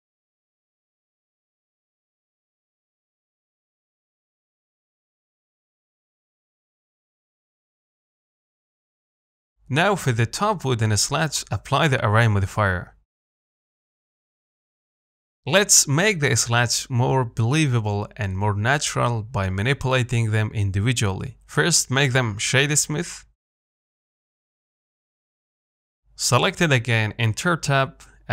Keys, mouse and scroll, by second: 1.4 Tab, 2.2 alt+click, 2.5 s, 5.0 alt+click, 5.4 s, 6.5 Tab, 6.8-8.2 middle drag, 8.2 click, 8.5-9.6 shift+middle drag, 9.6-10.0 scroll up 2, 10.0-11.0 shift+middle drag, 11.0-11.4 scroll down 1, 11.4-15.2 shift+middle drag, 15.2-20.6 drag, 20.6 scroll up 2, 20.9-22.4 shift+middle drag, 22.4 right click, 22.7-23.5 scroll down 2, 25.0 click, 25.8 scroll up 1, 26.1 shift+middle click, 26.5 scroll down 2, 26.7 middle click, 27.3 scroll up 2, 27.5 shift+middle click.